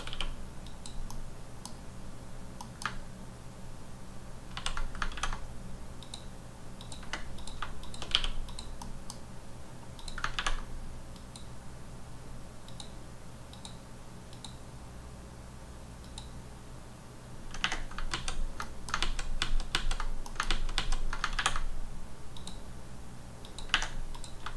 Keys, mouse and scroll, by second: 0.1 q, 0.6 click, 1.1 middle click, 2.3 scroll down 1, 2.6 middle click, 4.5 ctrl+z, 6.0 click, 6.8 click, 7.4 click, 8.1 q, 8.4 click, 8.8 middle click, 9.1-9.9 scroll up 2, 9.9 click, 11.1 click, 12.7 click, 13.5 click, 14.3 click, 16.0 click, 18.1 ctrl+z, 18.6 middle click, 19.0 z, 19.7 ctrl+z, 19.9 ctrl+scroll down 3, 20.2 middle click, 20.5 ctrl+z, 20.7 ctrl+z, 22.3 click, 23.4 click, 24.1 click.